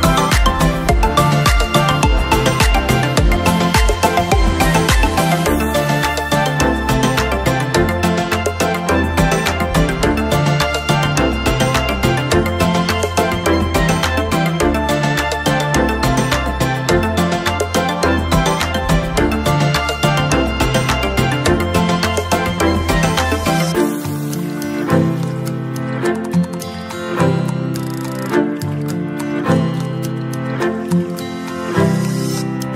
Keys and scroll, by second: 4.0 ctrl+?, 18.1 ctrl+?, 19.0 ctrl+™, 20.2 ctrl+o, 20.8 ctrl+o, 21.6 ctrl+j, 22.1 ctrl+~, 22.8 ctrl+™, 23.0 ctrl+¡.